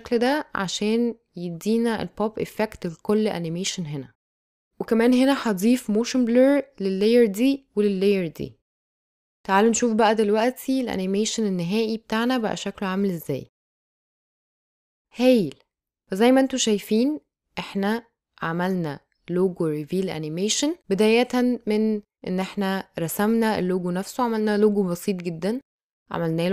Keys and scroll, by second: 7.8 space.